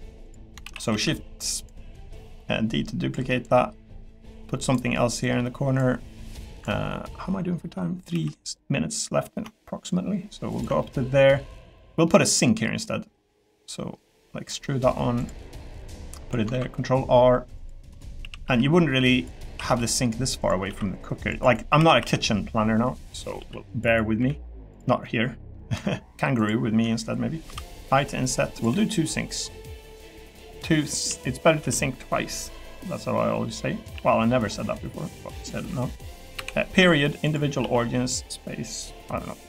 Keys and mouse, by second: 0.6 shift+d, 0.9 s, 1.5 click, 3.4 click, 8.1 e, 10.5 ctrl+click, 10.9 middle click, 11.7 middle click, 12.8 click, 14.6 middle click, 15.9 click, 16.5 ctrl+r, 18.2 s, 18.4 y, 19.4 s, 19.7 x, 20.6 ctrl+r, 21.8 s, 22.0 y, 23.0 click, 23.4 ctrl+r, 24.2 3, 24.7 click, 25.0 middle click, 26.3 shift+click, 27.4 i, 28.7 e, 29.8 click, 30.2 middle click, 31.1 a, 31.6 g, 32.6 click, 32.9 middle click, 33.5 middle click, 33.9 s, 36.3 ., 37.6 s, 38.5 middle click.